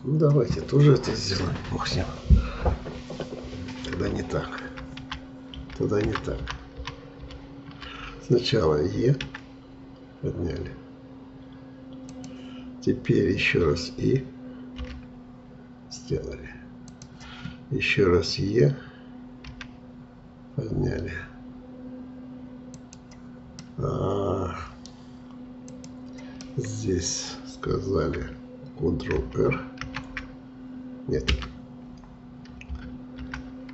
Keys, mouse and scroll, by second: 4.7 ctrl+z, 5.0 ctrl+z, 5.6 ctrl+z, 6.1 ctrl+z, 6.8 ctrl+z, 7.2 ctrl+z, 9.3 e, 19.5 e, 23.6-25.7 middle drag, 25.7 click, 26.5-29.6 middle drag, 29.8 shift+r, 31.3 Escape, 33.2 ctrl+z.